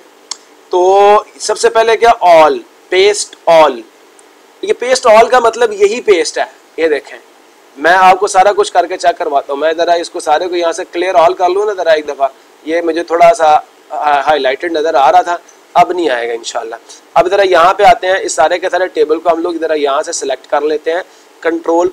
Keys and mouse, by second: 6.8 click, 8.6 click, 12.2 click, 13.7 click, 14.4 click, 15.4 click, 16.4 click, 20.9-21.9 drag.